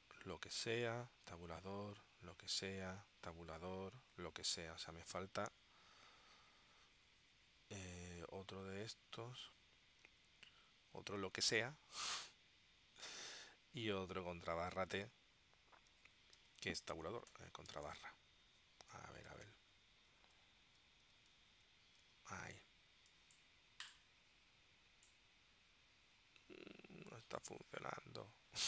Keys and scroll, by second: 8.0 Left, 8.4 Right, 8.8 Left, 9.5 shift+Left, 10.6 super+c, 10.8 Right, 11.7 super+v, 16.0 super+o, 16.5 t, 17.8 BackSpace, 19.4 shift+', 21.4 alt+º, 22.1 t.